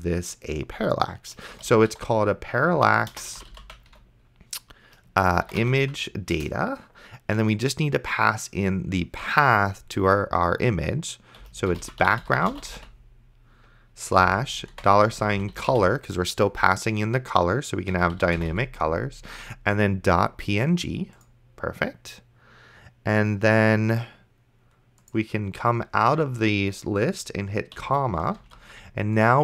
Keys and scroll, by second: 1.5-6.3 typing, 6.4 Return, 11.6-16.2 typing, 17.7-19.1 typing, 28.1 ,, 28.7 ctrl+s.